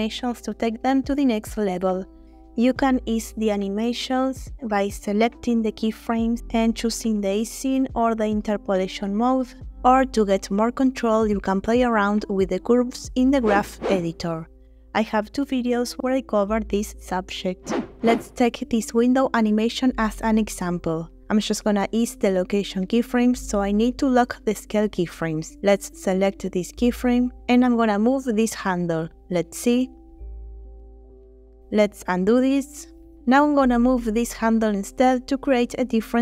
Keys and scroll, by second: 2.5 a, 8.2 a, 18.6 space, 22.6 space, 27.6 space, 31.7 space, 32.5 ctrl+z, 35.0 space.